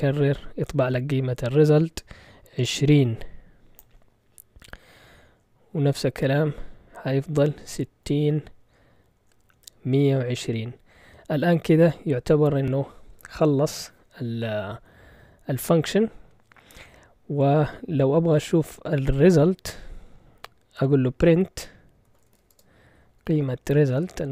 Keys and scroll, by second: 0.1 typing, 5.3 Return, 5.7 Return, 6.2 Return, 8.0 Return, 8.6 Return, 9.1 Return, 11.0 Return, 19.3 typing, 21.8-23.9 typing.